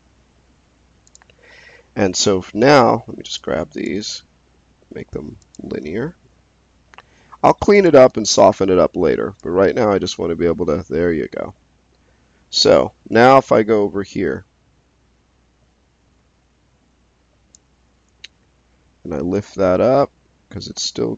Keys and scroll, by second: 8.0 space.